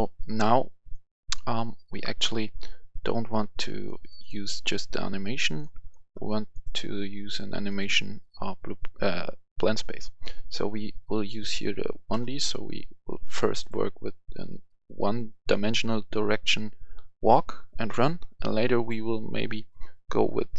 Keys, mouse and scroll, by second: 0.8 click, 6.5 right click, 7.6 click, 15.3 click.